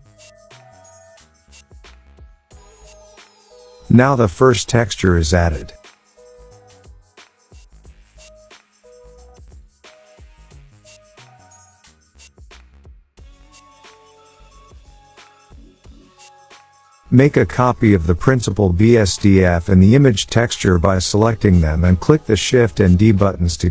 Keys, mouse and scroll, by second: 0.9 click, 2.6 click, 2.7 click, 10.8 click, 12.8 click, 13.5-14.8 scroll down 7, 15.2 scroll, 16.0 scroll down 7, 16.1 scroll up 1, 16.2 middle click, 18.3 click, 21.0 d.